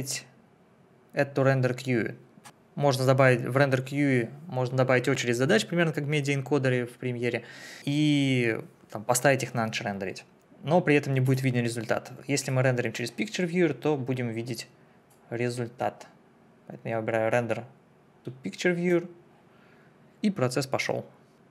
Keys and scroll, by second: 2.4 Delete.